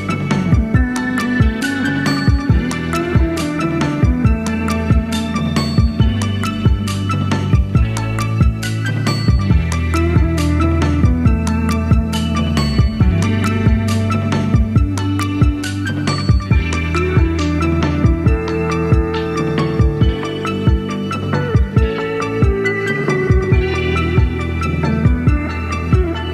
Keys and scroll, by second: 0.7 typing, 22.3 typing, 24.7 super+d.